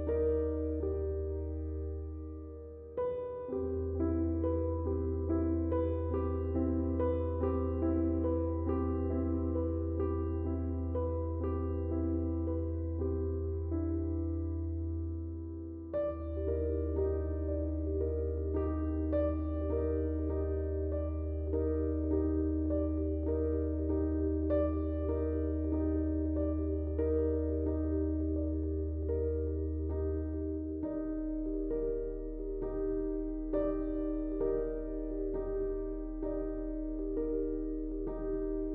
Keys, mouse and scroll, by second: 2.4 click, 6.2-17.3 drag, 22.1 click, 24.7 click, 31.4 Tab, 32.1 click, 35.8 space, 35.9 click, 36.3 space, 36.6-38.7 drag.